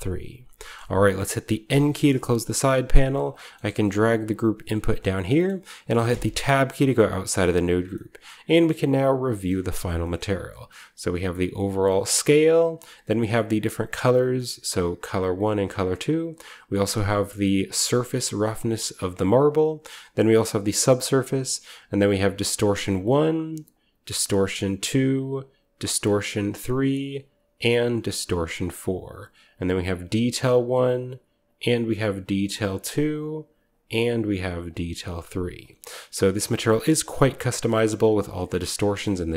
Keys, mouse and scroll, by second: 0.3-1.2 scroll down 1, 0.5-1.8 middle drag, 1.2-3.0 scroll down 1, 1.6 n, 3.1-4.8 drag, 3.6 g, 4.9 click, 5.1-6.6 scroll down 1, 6.0 Tab, 6.0 typing, 6.8-7.2 scroll up 1, 7.3-7.8 middle drag, 8.6 shift+middle click, 8.7-9.1 shift+scroll down 1, 9.1-11.3 shift+scroll up 1, 9.6 a, 10.4 shift+click, 11.0-11.8 typing, 12.2-14.3 drag, 13.7-14.8 typing, 15.3 click, 15.3 right click, 19.1-20.3 drag, 19.1-19.9 right drag, 19.6-20.4 typing, 21.1-21.6 drag, 23.2 click, 24.9 click, 27.0-28.9 drag, 27.2-28.0 typing, 29.3-30.9 drag, 31.4-33.0 drag, 33.6 click, 34.8-37.5 drag, 37.7-38.8 middle drag, 38.7-39.3 scroll down 1, 39.0 middle click.